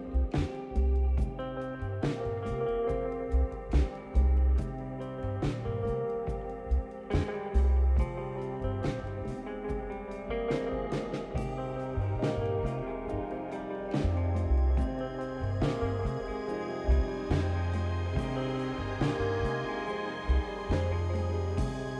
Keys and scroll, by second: 0.0-0.3 typing, 5.0-7.0 typing, 11.0-13.4 typing, 14.6-15.4 typing.